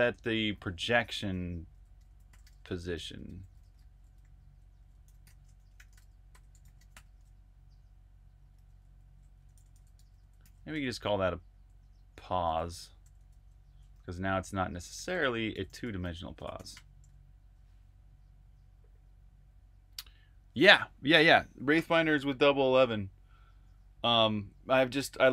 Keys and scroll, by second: 0.2-7.1 typing, 8.2-13.0 typing, 14.3-16.6 typing.